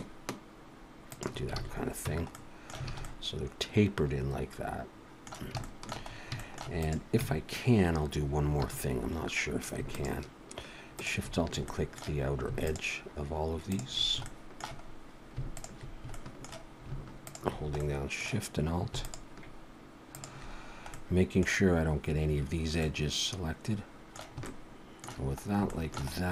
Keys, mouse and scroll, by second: 1.6 alt+a, 2.1 Tab, 2.3 middle click, 2.9 alt+a, 3.0 middle click, 5.6 shift+middle click, 6.1 scroll up 1, 6.4 shift+middle click, 6.7 click, 7.2 Tab, 8.6 2, 9.9 alt+shift+click, 10.9 alt+shift+click, 11.7 shift+middle click, 12.6 alt+shift+click, 13.7 alt+shift+click, 14.2 shift+middle click, 14.9-15.4 scroll up 1, 15.5 alt+shift+click, 16.1 shift+middle click, 17.3 alt+shift+click, 17.8 middle click, 19.0 alt+shift+click, 20.1 alt+shift+click, 20.6 scroll down 2, 20.9 middle click, 22.8 middle click, 24.4 shift+middle click, 25.4 scroll up 1, 25.7 shift+middle click, 26.2 scroll up 1.